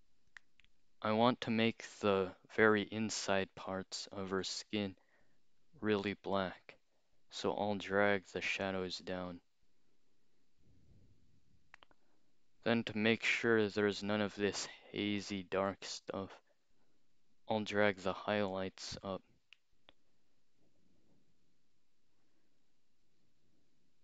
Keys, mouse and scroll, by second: 0.3 click, 8.1-12.0 drag, 18.2-23.2 drag.